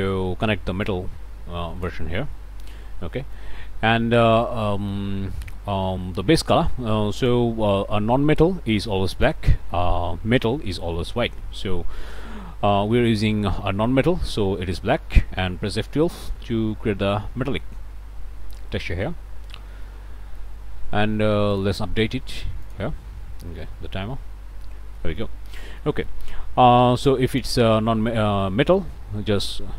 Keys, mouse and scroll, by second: 0.1-0.9 scroll up 1, 0.9-2.1 drag, 2.3 click, 3.1 click, 4.3 middle click, 4.3 scroll down 1, 4.7 shift+click, 5.3 shift+middle click, 5.6-7.5 drag, 9.2 click, 14.9 middle click, 16.1 F12, 19.8 middle click, 20.5-21.5 scroll up 1, 21.5 click, 22.6 click, 23.5 middle click, 25.0 middle click, 25.3 click, 25.8 middle click, 27.3 click, 28.7 click.